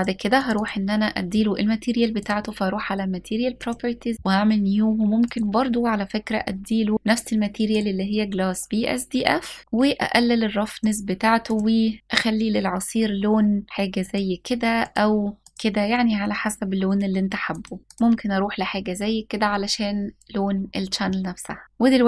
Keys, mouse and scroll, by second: 0.0 click, 0.2 click, 1.8 click, 3.2 click, 4.9-7.5 drag, 9.6 click, 11.1 click, 13.3 click, 17.8 click, 20.7-21.6 middle drag, 21.8-22.0 drag.